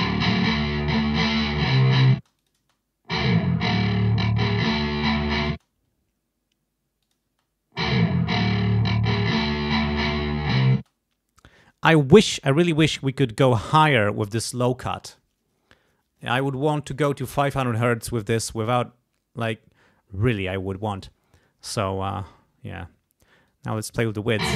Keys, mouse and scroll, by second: 0.2 click, 2.1 space, 2.3 click, 5.5 space, 7.0 click, 7.2 space, 10.7 space, 23.4 click, 23.8 space.